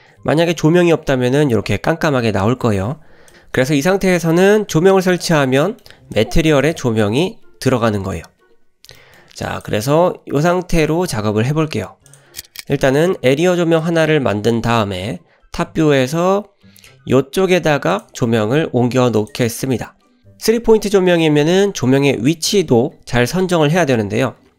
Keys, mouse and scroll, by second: 1.0 Delete, 2.5 ctrl+z, 4.7 drag, 5.2 click, 5.6 scroll down 1, 5.6 middle drag, 6.1 click, 6.7 click, 9.0 middle click, 9.5 drag, 10.2 `, 11.6-12.1 scroll down 2, 12.1 click, 16.1 g, 18.3 shift+middle drag, 18.7 g, 19.6 shift+middle click.